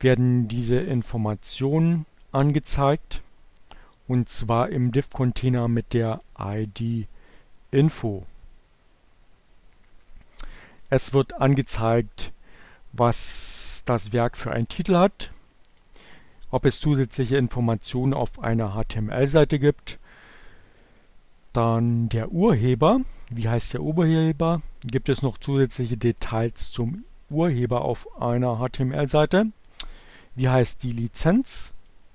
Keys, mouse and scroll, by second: 0.4-2.2 drag, 5.9 click, 10.4 click, 14.3-15.5 drag, 21.7 click, 29.7-31.7 drag.